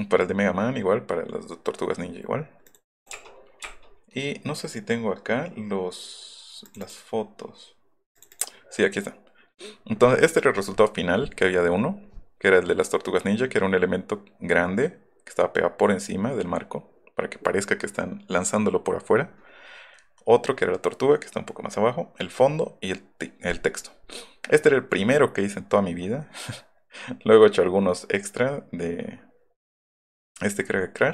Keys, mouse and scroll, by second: 3.0 click, 3.1 BackSpace, 3.6 BackSpace, 6.7 click, 6.8 click, 8.2 click, 8.3 click.